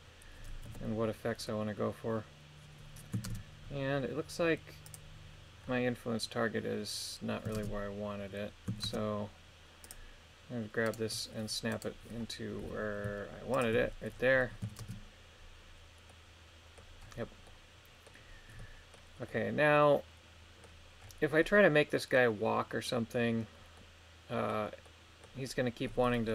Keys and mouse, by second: 0.7 KP_1, 3.2 shift+space, 4.9 click, 7.5 shift+space, 8.8 shift+space, 9.9 click, 10.8 right click, 11.7 right click, 12.6 g, 13.5 ctrl+click, 14.4 middle click, 14.8 shift+space, 16.1 middle click, 17.5 middle click, 18.6 middle click, 19.3-20.6 middle drag, 21.4 middle click, 23.8 middle click, 24.8 middle click, 25.9 middle click.